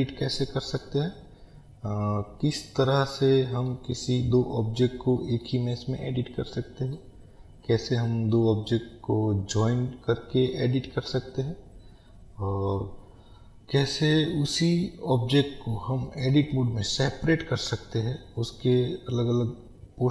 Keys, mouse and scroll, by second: 1.2-2.9 scroll up 1, 2.9 scroll down 1, 3.9-20.1 middle drag, 8.0-9.8 scroll up 2, 17.4-18.1 scroll down 2, 19.2-20.1 scroll down 1.